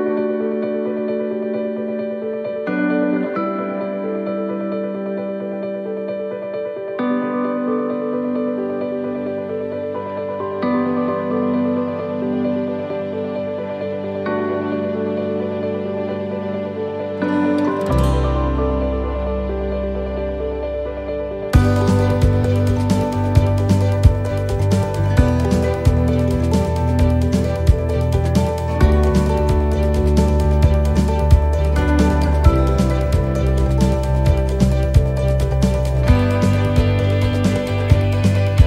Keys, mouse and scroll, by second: 0.8 s, 7.0 ctrl+r, 7.9 s, 10.2 ctrl+r, 11.2 s, 14.0 shift+middle click, 15.0 middle click, 19.1 right click, 19.6 alt+shift+right click, 20.6 right click, 21.1 alt+shift+right click, 22.7 right click, 24.4 s, 29.6 right click, 30.0 alt+shift+right click, 31.8 middle click, 33.5 alt+shift+right click, 34.9 s.